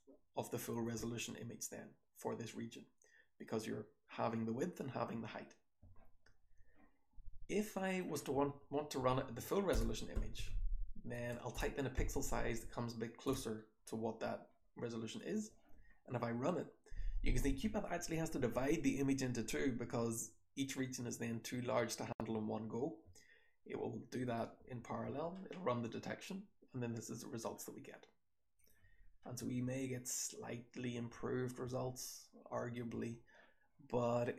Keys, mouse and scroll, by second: 0.2-0.8 scroll down 1, 0.8-5.6 scroll down 1, 5.6-7.7 scroll down 1, 24.2 click, 24.5 h, 25.0 h, 25.4-26.8 scroll up 2, 26.8-27.7 scroll down 2, 27.7-28.5 scroll up 2, 28.5 click, 28.5-30.1 scroll up 1, 28.7 h, 29.4 h, 30.1-31.1 scroll down 1, 31.1-32.8 scroll down 1, 31.1 h, 31.6 h, 32.1-32.8 drag, 32.8-34.3 scroll down 1.